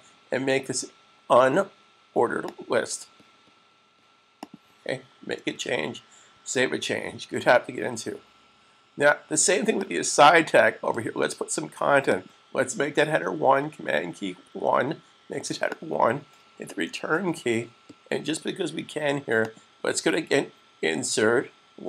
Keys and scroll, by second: 6.4 super+s, 14.3 super+1.